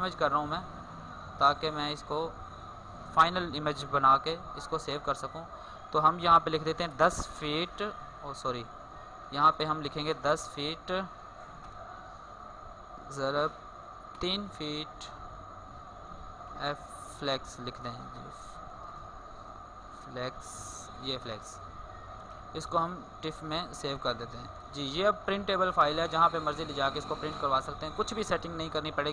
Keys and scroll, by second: 3.8 ctrl+alt+s, 8.6 ctrl+alt+s.